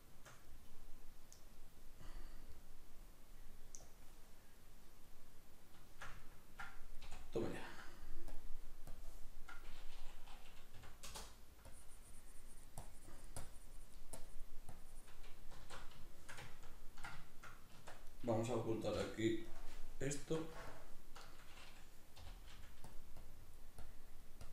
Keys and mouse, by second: 0.0-3.9 shift+middle drag, 3.9-5.1 drag, 5.1-7.1 middle drag, 7.6 ctrl+middle click, 8.3-15.6 drag, 15.6 alt+q, 16.0-17.7 shift+middle drag, 17.7 Tab, 18.0 right click, 18.9 h, 19.4 right click, 20.2 Tab, 20.7-22.2 ctrl+middle drag, 22.2 g, 22.5 f, 22.9 click.